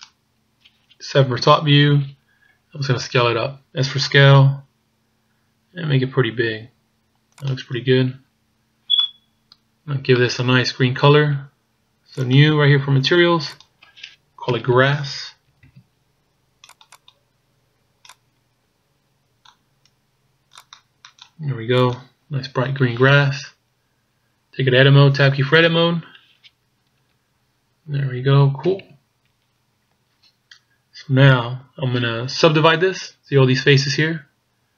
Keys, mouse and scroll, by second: 1.4 KP_7, 2.5-3.4 scroll down 5, 3.8 s, 7.9-8.7 scroll down 2, 8.7-9.0 scroll down 1, 9.0 middle click, 9.9 scroll up 4, 10.2 middle click, 10.7 scroll up 1, 12.2 click, 13.6 click, 15.7 s, 17.0 click, 23.8 scroll down 2, 25.8 Tab, 27.2 KP_1, 28.7 KP_8, 28.8 KP_8, 29.5-30.1 scroll up 1.